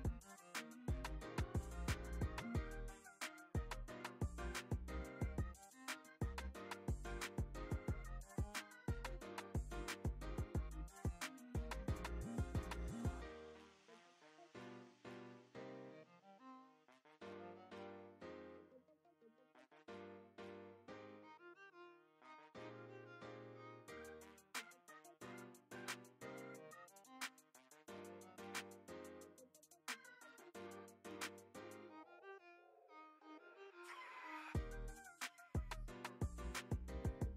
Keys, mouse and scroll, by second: 1.7 click, 2.4 middle click, 2.5 middle click, 2.7 click, 3.0 middle click, 3.1-4.1 drag, 4.4 middle click, 4.8 click, 5.0 f, 5.3 click, 5.6 shift+f, 5.8 shift+f, 5.9 click, 6.7 click, 7.2 shift+f, 7.3 shift+f, 7.4 middle click, 7.5 click, 8.0 ctrl+middle click, 8.2 middle click, 8.4 f, 8.6-10.0 drag, 10.1 ctrl+middle click, 10.5 f, 10.6 click, 11.0 click, 11.9 ctrl+middle click, 12.1 middle click, 12.3 f, 12.5-13.8 drag, 14.1 middle click, 14.1 click, 14.7 middle click, 15.1 click, 15.3 middle click, 15.4-16.6 drag, 16.7 middle click, 16.8-18.0 drag, 18.0 middle click, 18.1 middle click, 18.4 click, 19.3 middle click, 19.6 click, 19.8 middle click, 19.9 click, 20.2 middle click, 20.6 click, 21.3 middle click, 21.5 middle click, 22.1 click, 22.3 s, 22.8 click, 23.4-24.0 shift+f, 24.3 middle click, 24.3 f, 24.6 click, 24.8 click, 25.7 middle click, 25.9 click, 26.8 middle click, 27.1 click, 27.9 click, 28.1 middle click, 28.3 click, 28.7 middle click, 29.3 middle click, 29.6 middle click, 29.6 f, 29.7 click, 30.2 middle click, 30.3 click, 31.4 middle click, 31.7 f, 32.4 click, 32.7 click, 32.9 middle click, 33.8 click, 34.0 middle click, 34.1 shift+f, 34.4 middle click, 34.9 f, 35.1 click, 35.5 click, 36.7 middle click, 37.1 click.